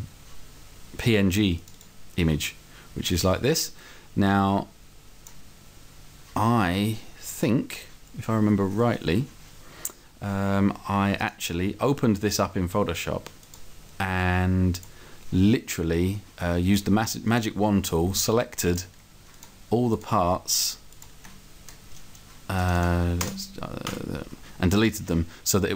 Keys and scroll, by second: 23.2 Return.